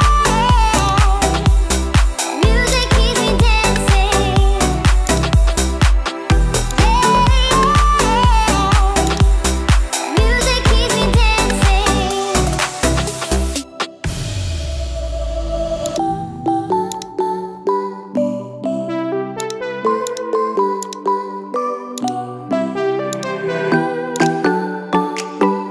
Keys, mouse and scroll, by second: 6.7 click, 7.3 Delete, 9.4 click, 14.7 n, 16.9 click, 19.4 click, 20.1 click, 20.9 click.